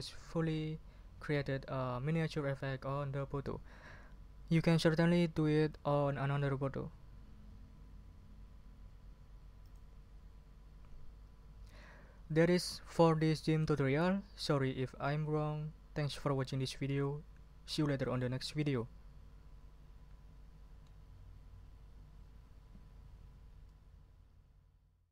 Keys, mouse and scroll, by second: 9.6 click.